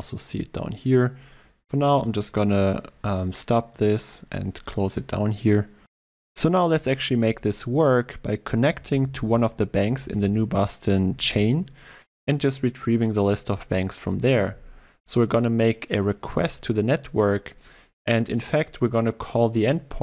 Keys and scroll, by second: 2.1 ctrl+F2.